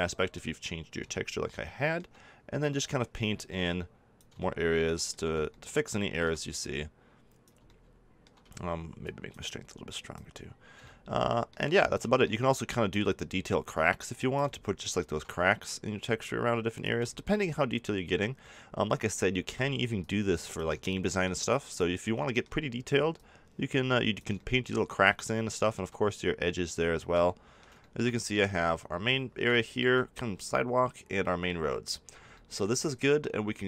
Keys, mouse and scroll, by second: 2.6-6.1 drag, 6.5-7.6 drag, 7.7-11.4 drag, 12.9-17.4 middle drag, 17.6 middle click, 18.6-19.9 drag, 21.2-24.5 middle drag, 25.0 middle click, 26.1-28.4 drag, 28.8 middle click, 29.7-31.0 middle drag, 33.2-33.6 middle drag.